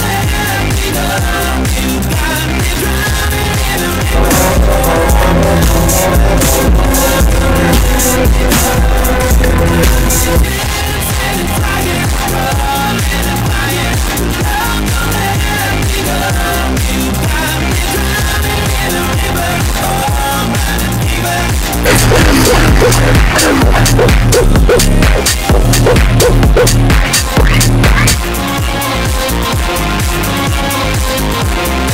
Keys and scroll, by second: 10.4 Page_Down, 28.1 Page_Down.